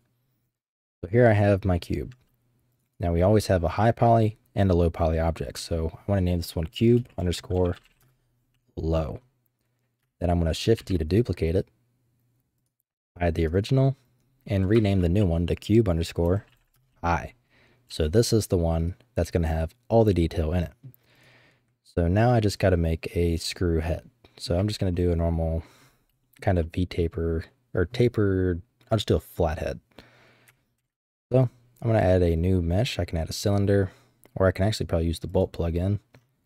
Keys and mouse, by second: 1.4 middle click, 2.9-8.6 drag, 10.8 shift+d, 12.6 click, 13.4 click, 13.5-17.3 drag, 14.9 BackSpace, 17.9 g, 19.5-20.8 middle drag, 21.2 click, 21.9-24.2 middle drag, 24.2 click, 24.2 right click, 26.2 shift+middle drag, 26.6-26.9 drag, 30.8 shift+a.